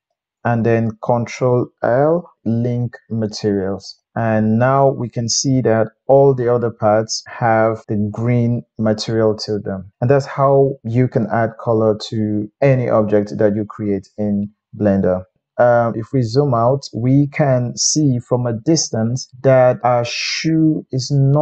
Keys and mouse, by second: 1.9 ctrl+l, 2.8-3.9 drag, 4.0 click, 4.4-9.9 middle drag, 10.9-15.7 middle drag, 16.3-21.4 ctrl+middle drag.